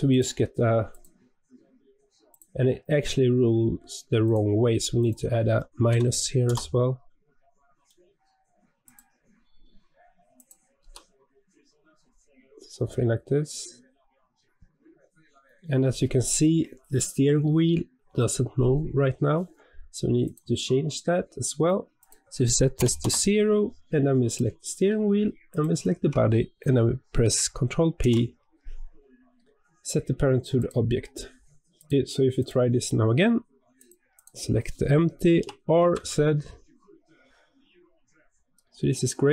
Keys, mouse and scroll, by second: 0.0 click, 0.8 click, 2.2 click, 4.1-7.2 drag, 7.8-8.8 middle drag, 8.8 click, 10.3 click, 10.7 r, 21.9-24.3 drag, 25.4 shift+click, 27.9 ctrl+p, 31.7 click, 32.3 click, 33.7 click, 34.0 click, 35.3 r.